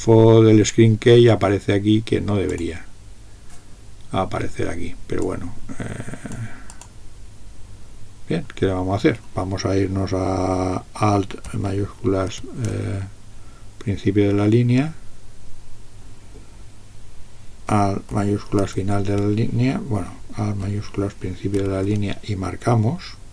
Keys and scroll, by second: 12.3 alt+(, 18.6 alt+), 21.6 alt+(.